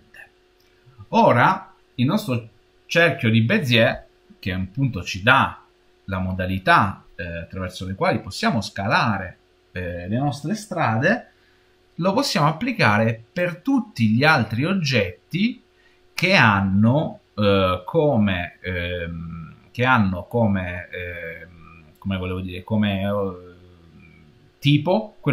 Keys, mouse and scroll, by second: 13.3 click.